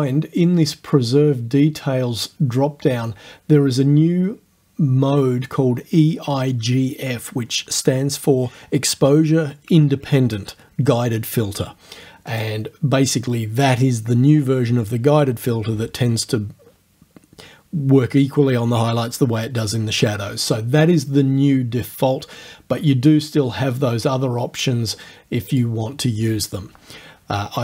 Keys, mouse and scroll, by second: 12.3 click, 25.6 click.